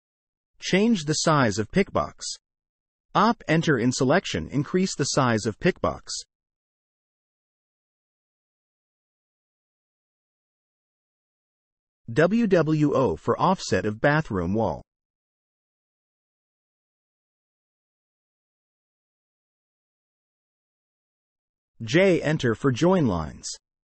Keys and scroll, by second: 0.2 Escape, 0.9 o, 1.2 space, 6.9 Escape, 7.6 w, 8.1 space, 8.9 6, 9.4 Return, 15.8 Escape, 19.0 Delete, 20.8 Escape, 21.4 j, 21.5 space, 22.5 space.